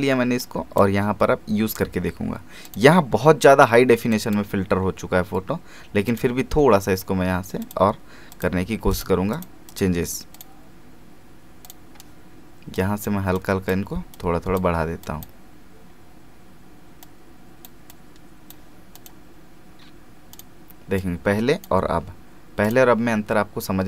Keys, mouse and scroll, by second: 1.0 scroll up 1, 2.6 click, 3.1 scroll down 1, 4.1 click, 4.6 scroll up 1, 6.1-22.6 drag.